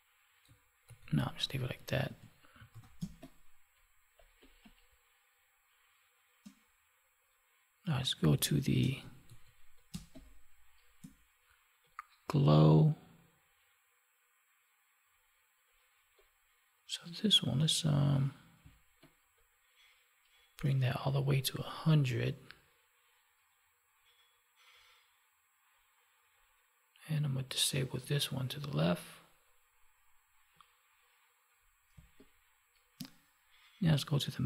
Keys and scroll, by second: 0.8 ctrl+z, 2.0 Up, 2.7 ctrl+s, 2.9 space, 8.3 space, 9.2 ctrl+z, 9.9 space, 18.6 space, 31.9 space.